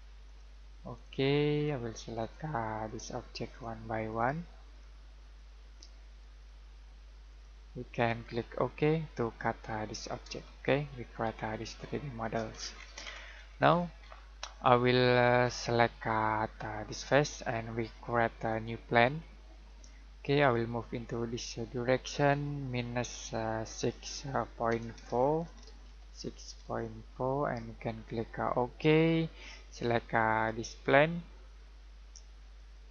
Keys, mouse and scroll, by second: 10.8 shift+middle click, 12.5 scroll down 1, 12.7-16.1 scroll up 1, 16.9 click, 24.7-26.9 typing, 32.5 click.